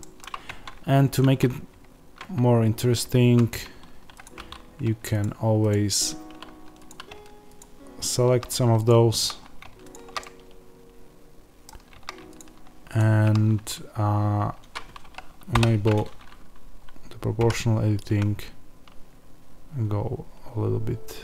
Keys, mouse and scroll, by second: 0.4 Tab, 3.3 z, 4.1 click, 5.1 ctrl+click, 10.1 middle click, 12.3 shift+click, 15.4 o.